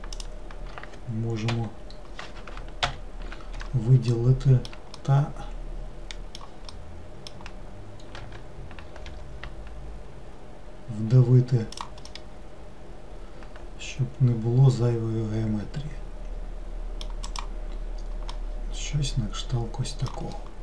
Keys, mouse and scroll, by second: 0.2 shift+click, 1.6 l, 2.9 ctrl+l, 4.1 alt+middle click, 5.0-8.3 middle drag, 8.3 g, 12.1-15.2 middle drag, 17.3 click, 17.9-18.4 scroll down 1, 18.4-20.6 middle drag.